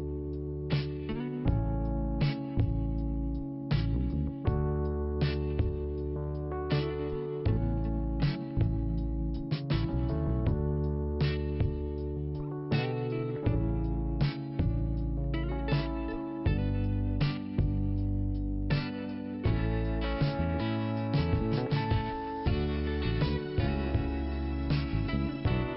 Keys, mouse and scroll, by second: 2.5 click, 2.6 click, 4.1 click, 4.8 middle click, 6.6 click, 12.3 click, 12.4 click, 14.7 click, 20.0 click, 20.0 click, 21.1 click, 23.6 middle click, 24.6 click, 24.7 click, 25.3 click.